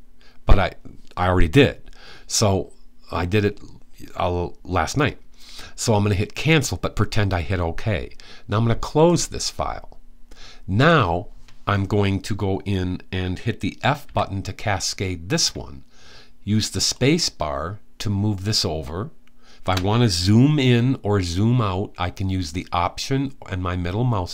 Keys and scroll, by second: 13.8 f.